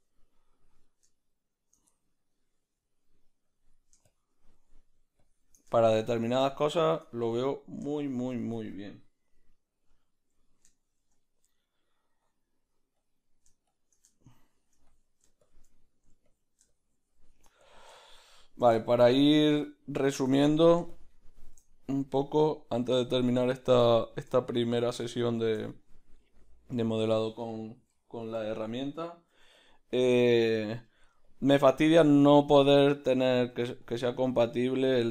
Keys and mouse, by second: 1.1 shift+middle click, 6.1 shift+middle click, 6.4-9.2 shift+drag, 9.2-11.2 middle drag, 10.4 shift+click, 11.2-29.6 drag, 14.1 shift+middle click, 18.7 shift+middle click, 25.7-30.1 middle drag, 29.6 f, 30.1-33.9 drag, 30.7 middle click, 32.0 middle click, 32.5 shift+middle click, 33.2 middle click, 33.9 middle click, 33.9 f, 34.3-35.1 drag.